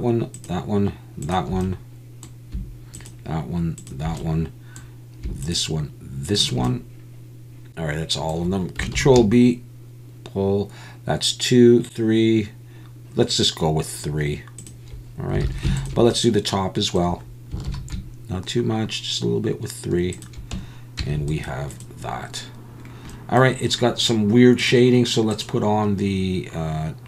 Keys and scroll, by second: 9.0 ctrl+b, 15.4 alt+a, 17.7 ctrl+b, 21.0 Tab.